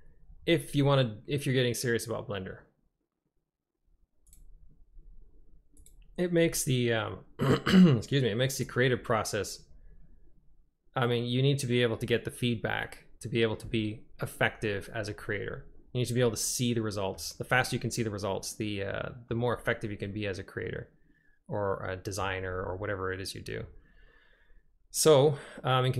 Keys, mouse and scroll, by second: 6.0 click, 9.0 click, 16.3-17.2 middle drag, 18.0-19.4 drag, 19.9 click, 20.2 middle click, 20.3-22.3 drag, 22.8-23.7 middle drag.